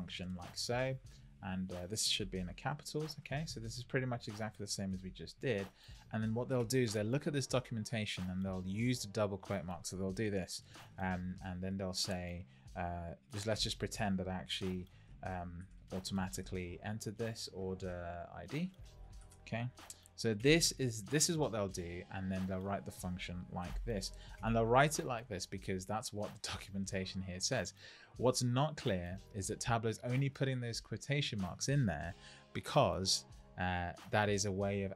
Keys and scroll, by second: 0.0-0.3 typing, 0.4 Left, 2.6 shift+r, 3.0 Right, 5.3 Right, 10.7 shift+', 11.5 Left, 15.0 shift+o, 18.7-19.7 typing.